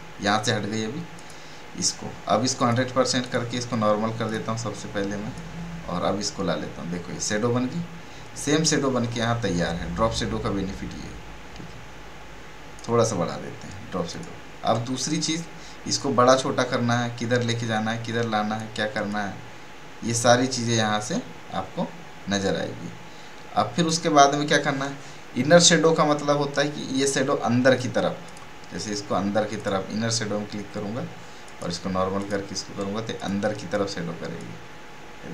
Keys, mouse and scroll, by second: 1.1-26.3 drag, 28.2-35.3 drag.